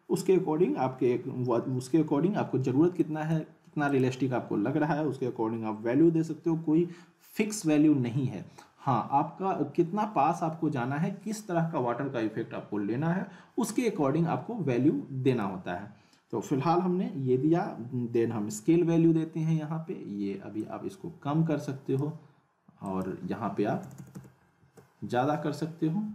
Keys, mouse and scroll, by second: 3.0-3.6 click, 15.3 click, 20.6-22.1 drag, 26.0 click.